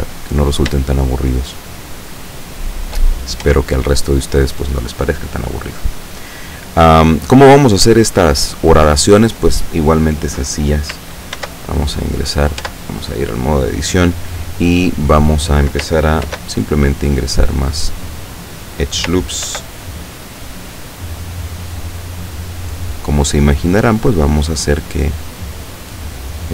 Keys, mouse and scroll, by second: 0.2 click, 1.0-3.1 shift+middle drag, 3.5 Tab, 4.2 click, 4.4 right click, 11.4 ctrl+r, 12.7 Tab, 16.3 ctrl+r, 16.9 click, 18.3 click, 19.5 ctrl+r, 20.5 click, 21.3 click, 24.0 right click, 24.9-26.5 drag.